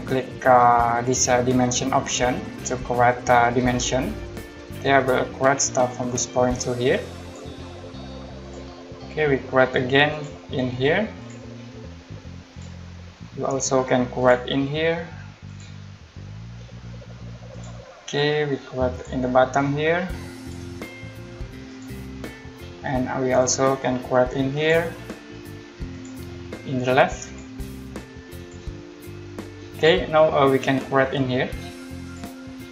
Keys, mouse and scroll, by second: 3.6 click, 6.1 click, 10.1 click, 13.3-14.2 scroll up 1, 14.2 click, 17.5 click, 20.4 click, 23.4 click, 32.0 click.